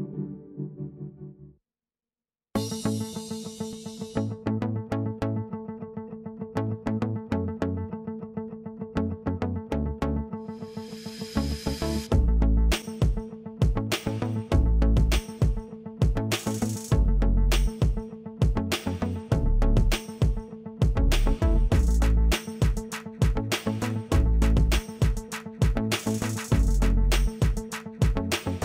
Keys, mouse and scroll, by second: 14.3-23.0 drag, 26.5-28.4 drag.